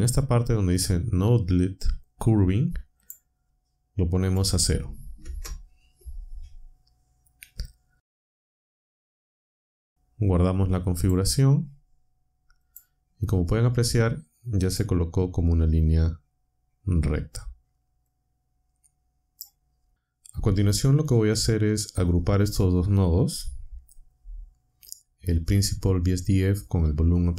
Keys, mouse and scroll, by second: 3.0 click, 4.0-5.2 typing, 10.8 click, 12.6 click, 14.6 click, 18.1-19.5 drag.